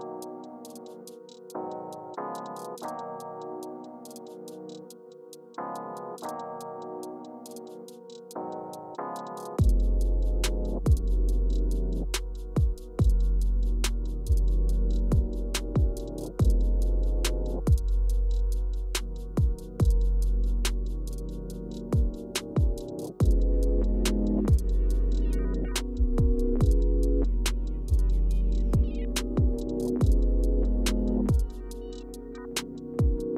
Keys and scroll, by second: 0.0 Return, 0.4 Return, 1.8 Down, 3.4 ⇠, 5.6 ⇠, 6.7 ⇠, 9.7 Return, 11.3 Return, 13.7 Return, 14.7 Left, 15.2 Left, 15.7 Down, 16.7 Left, 20.1 Return, 28.9 Return, 29.9 Right, 30.8 Return, 31.1 Right, 31.4 Return.